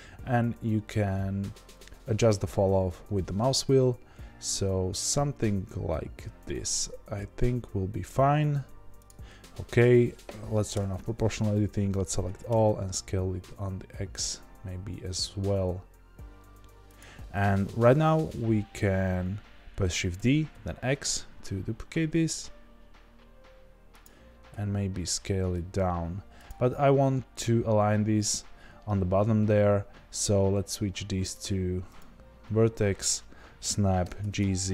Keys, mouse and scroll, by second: 11.6 a, 20.1 shift+d, 24.5 s, 34.1-34.7 drag, 34.1 g.